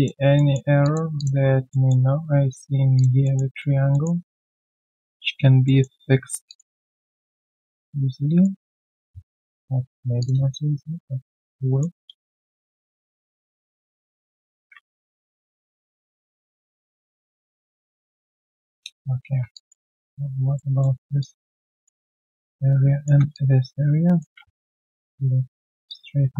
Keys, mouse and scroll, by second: 0.3 alt+middle click, 0.8 alt+click, 1.7 alt+middle click, 2.9 alt+click, 3.2 alt+middle click, 3.5 alt+right click, 3.9 alt+middle click, 4.1 alt+right click, 4.7 alt+middle click, 5.0 alt+right click, 5.6 alt+middle click, 6.4 alt+click, 6.8 right click, 7.8 right click, 10.8 middle click, 11.0-12.1 typing, 11.8 scroll down 1, 15.5 shift+click, 18.1 middle click, 18.2-19.3 typing, 20.8 alt+middle click, 21.2 alt+click, 22.4 ctrl+shift+click, 23.3 alt+click, 24.3 typing, 25.8 alt+click, 26.2 alt+click.